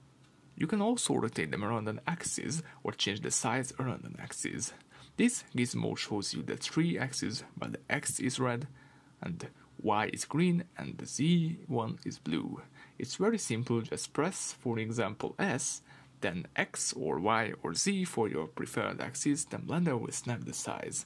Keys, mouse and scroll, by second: 0.3 middle click, 0.5 scroll down 1, 3.2 scroll up 1, 7.8 s, 12.8 Escape, 13.1 s, 13.8-15.7 middle drag, 15.7 Escape, 16.9 r, 19.0 Escape, 19.3 r.